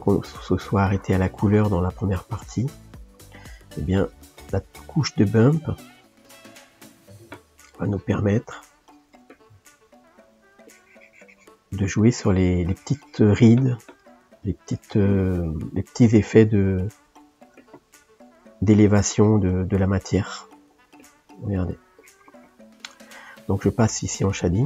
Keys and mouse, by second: 0.0-3.0 drag, 9.8 middle click, 10.7-13.7 drag, 14.0 shift+middle click, 14.7-17.0 drag, 17.0-18.7 middle drag, 18.7-21.4 drag, 21.4 middle click, 22.0-24.6 drag.